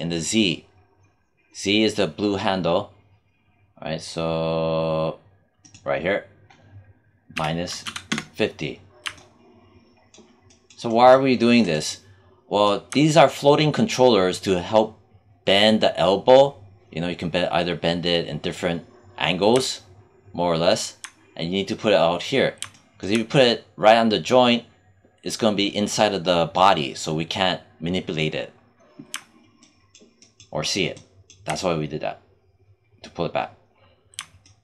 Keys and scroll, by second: 7.2 -, 8.0 Return.